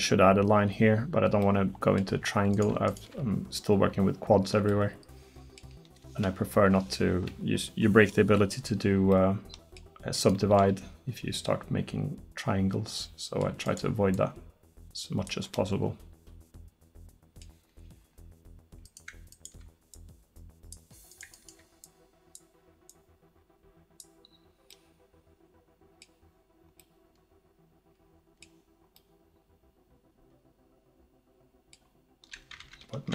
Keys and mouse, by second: 3.4-4.7 right drag, 13.7-15.6 middle drag, 15.6 click, 16.4-17.5 drag, 18.9-20.0 drag, 24.7-27.9 middle drag, 30.9 middle click.